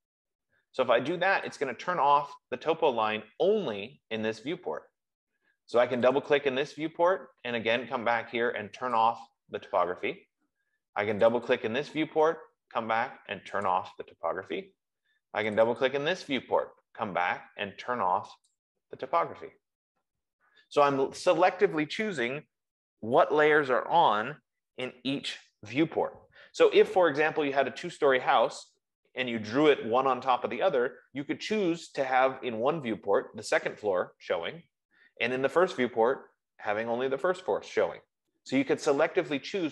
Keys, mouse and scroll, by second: 1.8 click, 6.4 click, 6.8 click, 9.4 click, 11.6 click, 11.9 click, 14.1 click, 15.9 click, 16.3 click, 18.9 click, 22.7 F15.